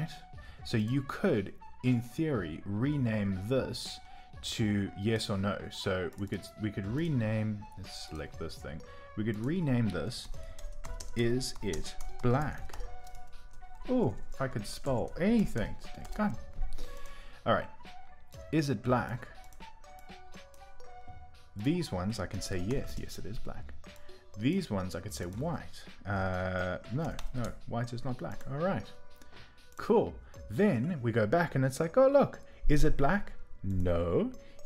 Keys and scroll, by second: 10.2 super+a, 10.3-12.5 typing, 16.0 Return, 22.1-24.5 typing, 26.8-27.5 typing.